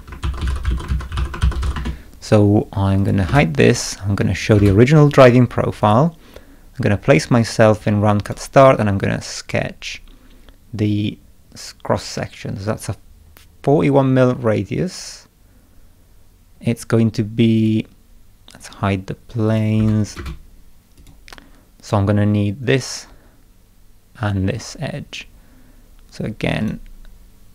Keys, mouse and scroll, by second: 0.0-2.1 typing, 3.0 click, 3.2 space, 4.4 click, 4.5 space, 5.8 click, 8.2 click, 10.9 scroll down 2, 13.2 scroll up 2, 13.8 scroll up 2, 16.5 scroll up 2, 17.5 click, 18.6 scroll down 2, 19.5 click, 19.7 space, 20.0 click, 20.1 space, 20.9 click, 26.6 click.